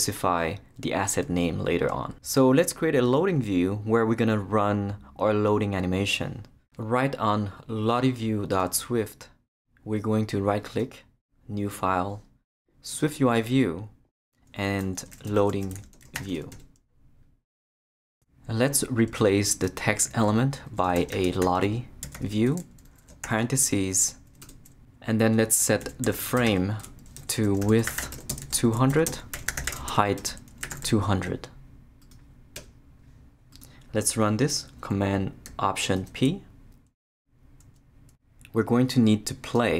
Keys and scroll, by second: 14.9-16.7 typing, 20.7-23.2 typing, 23.1 shift+Return, 25.8-31.2 typing, 27.2 Left, 32.5 Return, 36.0 alt+super+p.